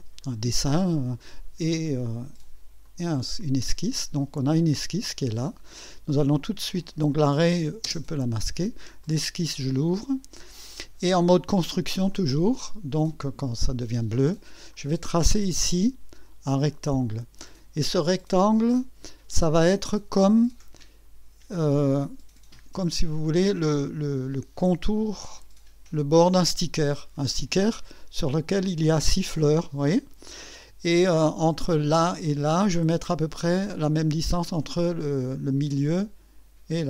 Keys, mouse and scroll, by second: 2.8 click, 5.4 click, 7.1 click, 7.8 space, 9.0 click, 12.1 click, 14.7 click, 16.7 click, 18.8 click, 19.5 scroll up 1, 20.8 right click, 22.0-24.5 drag, 25.2-26.9 drag, 28.2 click, 30.3-36.8 middle drag, 30.3-36.8 scroll up 1.